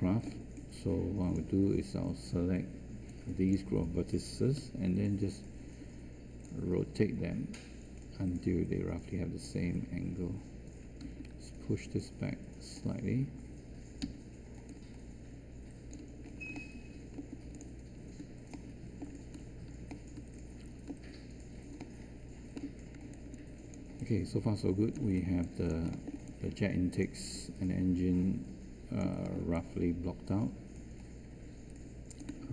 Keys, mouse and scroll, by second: 4.5 e, 11.0 w, 14.0 z, 23.0 space.